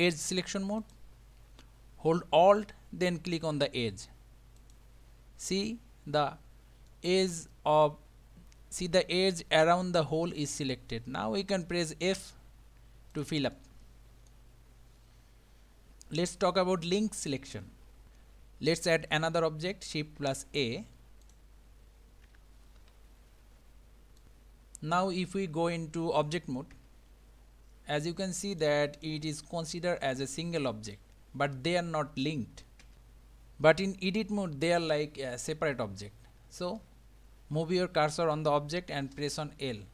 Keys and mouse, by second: 0.8 click, 4.6 alt+click, 6.9-10.0 middle drag, 10.9 middle click, 12.2 f, 13.1 click, 13.6 middle click, 16.4-18.0 middle drag, 20.2 shift+a, 22.3 g, 26.7 Tab, 28.6 click, 29.0 click, 32.8 Tab, 37.0 ctrl+z, 39.7 l.